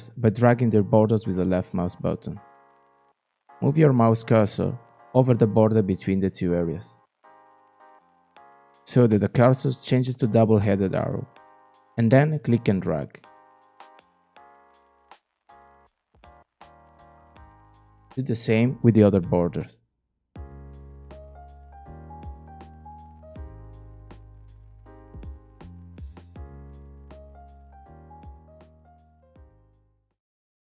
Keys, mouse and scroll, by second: 13.1-16.9 drag, 20.9-22.6 drag, 25.4-27.2 drag.